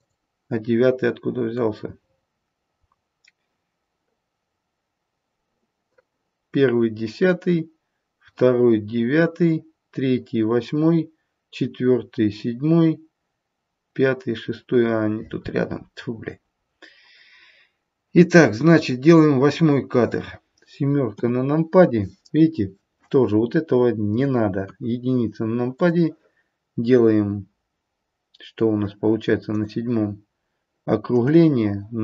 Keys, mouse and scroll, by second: 1.9-2.7 scroll up 3, 2.7-5.5 scroll up 4, 19.2 click, 21.0 KP_7, 24.5 KP_1, 25.7 click, 29.5 click, 31.2 click.